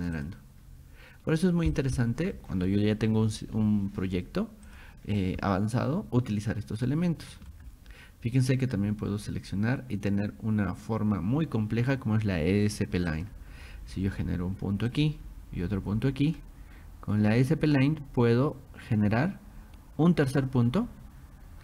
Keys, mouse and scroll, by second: 0.0 click, 0.2 click, 1.3 scroll down 1, 1.7 click, 2.0 middle click, 2.1 scroll, 4.7 click, 6.9 middle click, 13.1 click, 13.7 middle click, 13.7-14.0 scroll, 14.9 click, 16.3 click, 20.4 click.